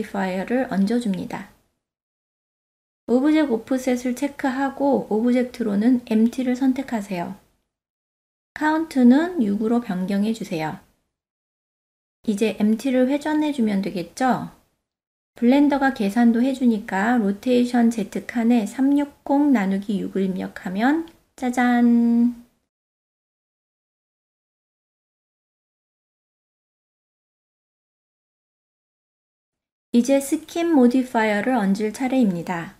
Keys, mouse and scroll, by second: 1.5 click, 2.8 click, 3.5 click, 7.0-8.2 drag, 10.5 click, 18.7-21.6 drag, 22.8-26.3 middle drag, 26.7-27.3 middle drag, 28.2 click, 31.1 click, 32.2 click.